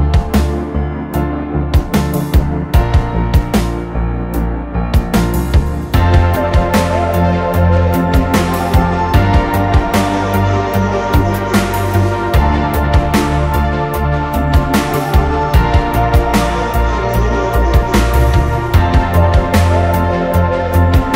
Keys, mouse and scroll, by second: 13.2 alt+right click, 14.4 Up, 15.6 Up, 17.6 ctrl+t, 19.2 Return.